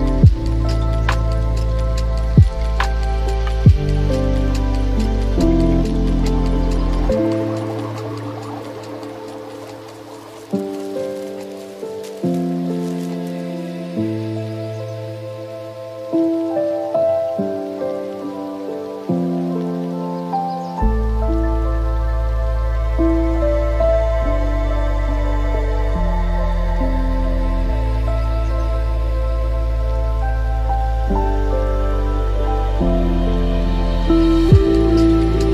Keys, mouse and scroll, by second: 10.0 drag, 10.7 shift+a, 20.0-20.9 scroll up 3, 20.9-24.9 middle drag, 24.9-29.3 drag, 29.9-31.1 drag, 31.1 g, 34.9-35.5 middle drag.